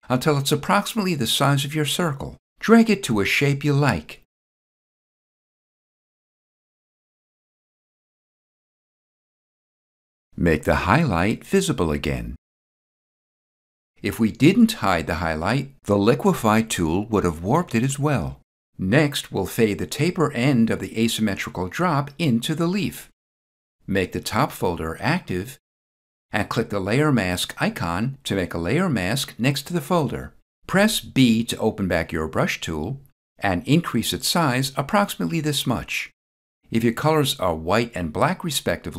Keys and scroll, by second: 31.2 b.